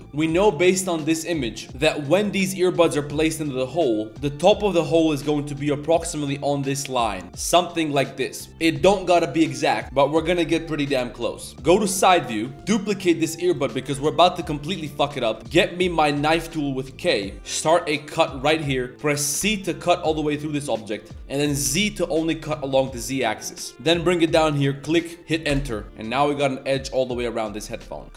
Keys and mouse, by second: 4.1 Tab, 4.1 1, 4.1 z, 4.7 b, 8.5 Tab, 8.5 ctrl+s, 11.5 KP_3, 12.0 Tab, 12.3 shift+middle click, 12.5 ctrl+z, 12.5 x, 12.5 a, 12.5 b, 12.7 shift+d, 13.7 g, 14.7 click, 15.4 Tab, 15.4 z, 16.0 ctrl+s, 16.2 a, 25.8-27.7 middle drag, 25.8 z.